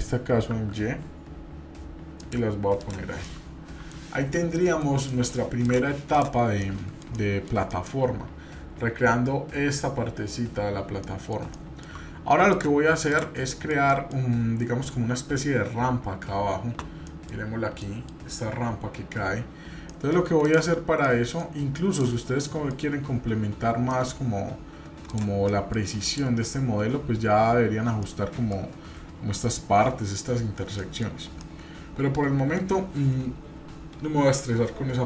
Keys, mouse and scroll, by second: 2.8 click, 3.2-3.9 middle drag, 4.5 shift+middle click, 5.1-5.4 middle drag, 5.6 click, 6.1 click, 6.6-7.5 middle drag, 7.7 middle click, 8.2-9.6 scroll down 2, 10.8 scroll down 1, 11.0 middle click, 11.5-11.9 shift+middle drag, 12.5 drag, 13.0 click, 13.5-14.2 middle drag, 17.1 middle click, 17.4-17.8 scroll up 2, 17.8 middle click, 19.9 middle click, 20.4 click, 21.0 middle click, 21.9 click, 22.5 middle click, 23.0-23.9 scroll up 1, 23.9 middle drag, 25.1 click, 25.4 middle click, 26.0 click, 26.9-27.3 scroll up 1, 28.0-28.5 shift+middle drag, 30.8 middle click, 31.0 scroll down 1, 31.4-32.6 middle drag.